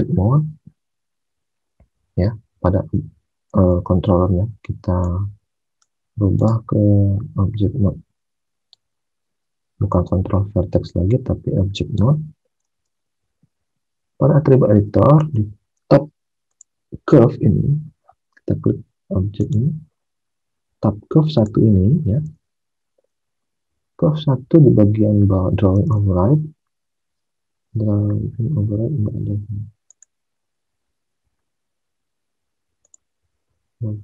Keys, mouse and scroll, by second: 3.7 alt+Tab, 12.6 alt+Tab, 15.1 alt+Tab, 22.3 alt+Tab, 25.9 alt+Tab, 33.4 alt+Tab.